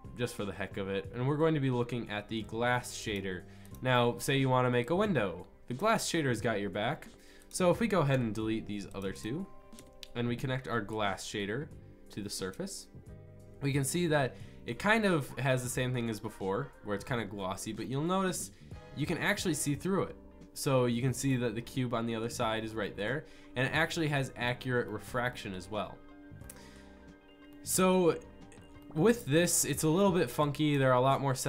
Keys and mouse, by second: 5.1 click, 8.1 Delete, 10.0 Delete, 10.0 click, 15.7 click, 31.2-31.4 drag.